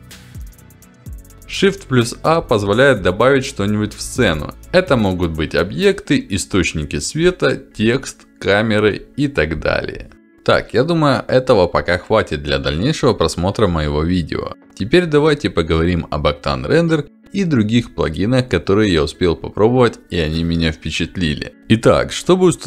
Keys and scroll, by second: 1.9 shift+a.